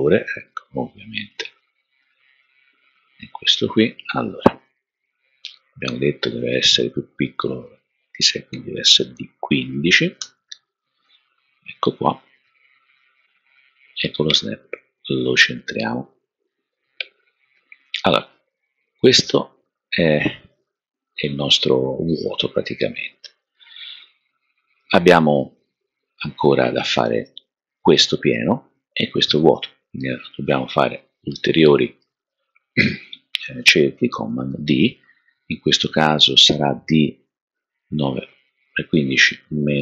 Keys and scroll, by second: 8.2-9.0 typing, 10.2 Return, 34.2 super+d.